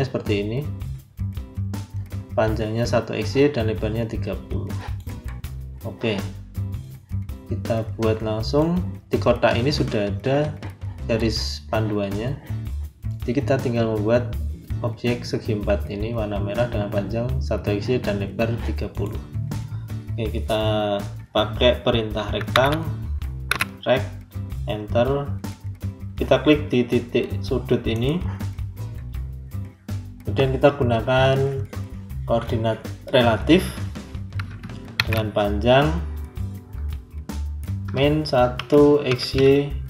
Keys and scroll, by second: 22.0-23.4 typing, 24.2 Return, 34.8 shift+2, 37.7 KP_Subtract, 38.5 1.